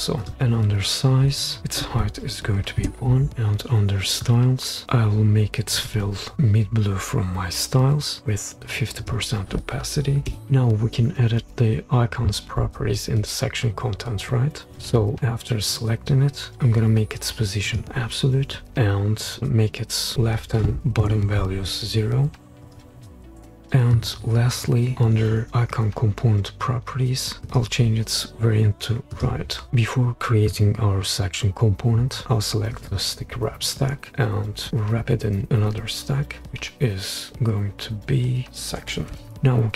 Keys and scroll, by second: 2.5 1, 2.8 Return, 10.3 5, 10.5 Return, 20.8 typing, 23.0 0, 23.4 Return, 38.7-39.1 typing.